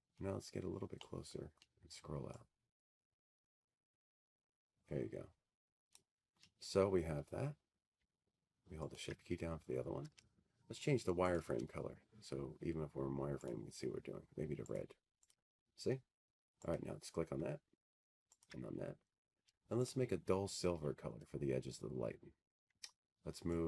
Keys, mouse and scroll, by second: 1.0 click, 2.2 click, 2.2-3.2 scroll, 5.1 click, 5.6-6.7 scroll, 6.7-7.2 scroll, 7.2-8.4 scroll, 8.4-8.8 scroll, 11.5 click, 11.9-13.6 scroll, 14.7 ctrl+click, 16.9 click, 20.3 click, 20.9 click, 22.4 click.